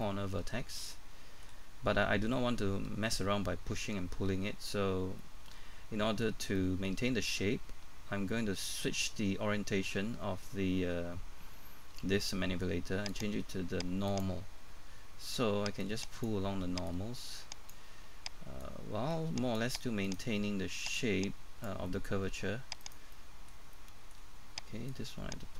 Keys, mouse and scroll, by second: 0.0 middle click, 13.1 click, 14.6-15.8 scroll up 1, 15.8-20.0 drag, 20.0 right click, 20.9 click, 21.9 middle click, 22.8 right click, 23.1 middle click, 24.9 click.